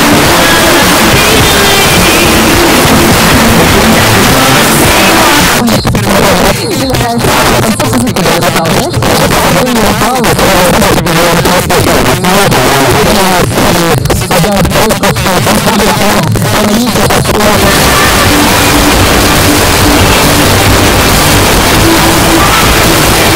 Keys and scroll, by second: 5.5 Page_Down.